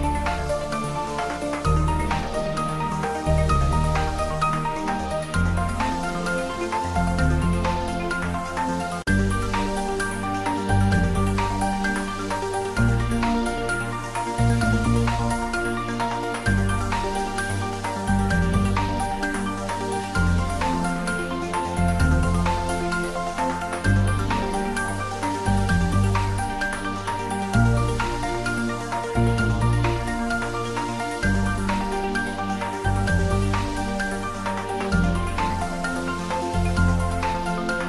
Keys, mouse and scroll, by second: 6.7 click, 9.1 click, 13.4-16.9 drag, 17.0-17.9 scroll down 1, 18.0-18.4 scroll up 1, 19.3-21.5 middle drag, 21.5-22.1 scroll up 1, 22.3 middle click, 22.6 click, 35.7 click, 37.6 click.